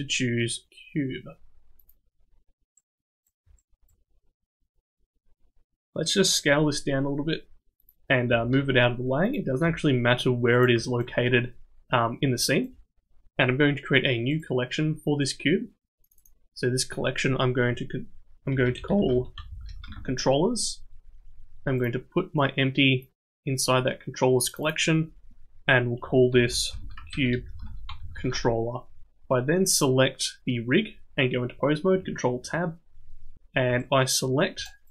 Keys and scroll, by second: 6.5 s, 8.3 g, 9.6 s, 19.5 l, 28.0 l, 32.3 ctrl+Tab.